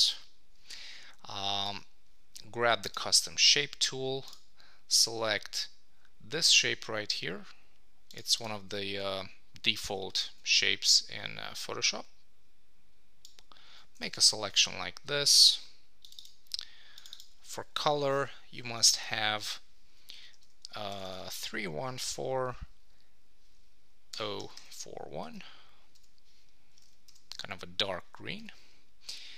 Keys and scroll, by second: 14.0 Return, 25.2 Return.